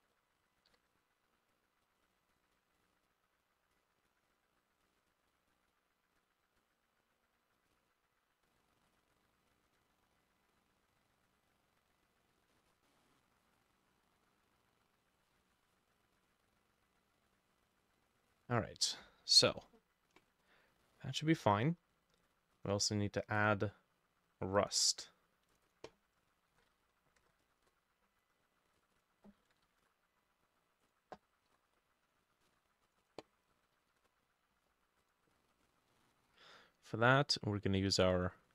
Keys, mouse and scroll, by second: 0.7 ctrl+u, 9.6 ctrl+click, 12.6 ctrl+middle click, 12.9 middle click, 14.2 double click, 15.4 double click, 15.8 double click, 16.2 double click, 17.3 double click, 17.8 double click, 20.5-20.8 scroll down 2, 20.9 middle click, 24.9-26.9 drag, 26.0-27.5 typing, 27.7 Return, 29.0 double click, 29.2-30.0 typing, 31.5 Insert, 32.5 ctrl+g, 33.1 double click, 33.3-34.4 typing, 35.7 scroll up 2, 36.0 middle click.